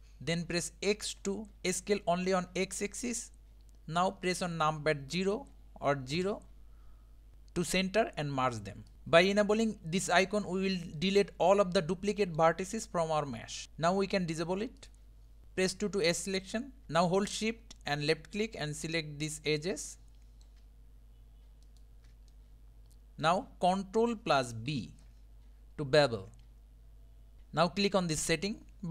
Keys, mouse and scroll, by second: 8.9 KP_1, 11.0-13.6 middle drag, 14.8 click, 15.4 2, 15.8 2, 16.8-18.0 middle drag, 18.0 shift+click, 20.0-21.6 middle drag, 21.6 shift+click, 21.7-22.3 scroll up 1, 22.3-24.7 middle drag, 24.7 KP_1, 26.0 ctrl+b.